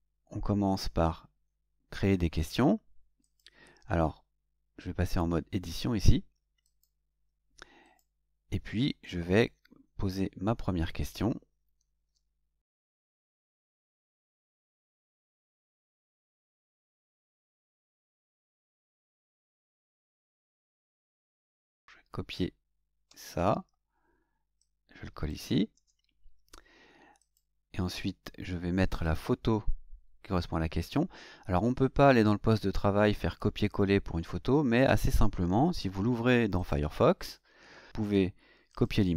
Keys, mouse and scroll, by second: 2.4 click, 3.2 click, 6.6 click, 7.8 click, 12.3 Tab, 13.4 Tab, 15.8-17.1 drag, 17.9 ctrl+c, 19.1 click, 21.8 click, 23.0 ctrl+c, 24.6 click, 25.7 ctrl+v, 27.2 click, 28.9 click, 36.5 click, 38.0 right click, 38.7 click.